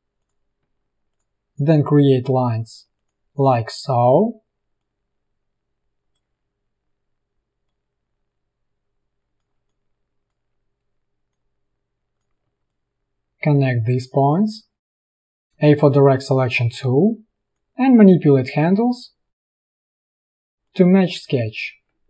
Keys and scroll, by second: 9.7 space, 13.2 space, 15.4 a, 15.7 space, 16.2 a, 21.3 space.